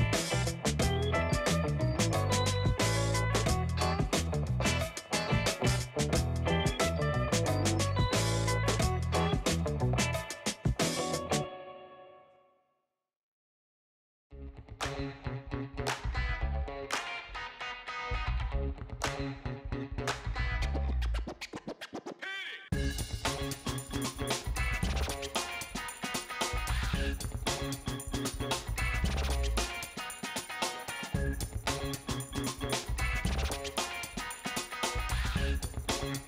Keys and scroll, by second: 4.1-4.8 space, 5.9 space, 25.3 BackSpace.